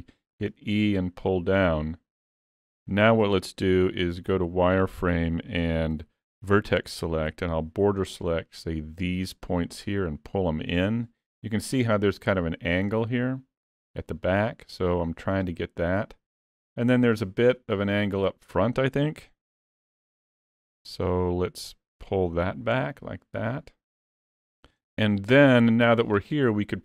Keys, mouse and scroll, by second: 0.4 e, 3.0 shift+middle click, 3.7 z, 5.0 1, 6.1 alt+a, 7.3 b, 9.6 click, 14.9 click, 20.0 alt+a, 20.4 b, 21.7 click, 24.8 Tab.